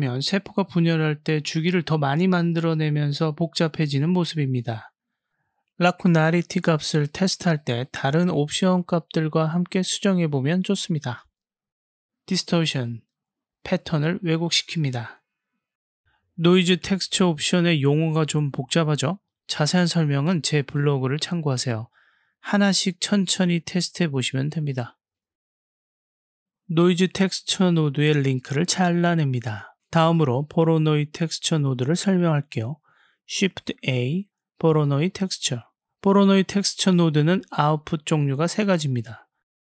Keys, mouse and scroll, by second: 5.3-6.5 drag, 6.8-8.6 drag, 9.3-12.3 drag, 13.8-16.7 drag, 17.0 click, 17.5 click, 21.2 click, 21.4 click, 23.3 click, 26.2 click, 28.2-28.7 drag, 33.2 shift+a.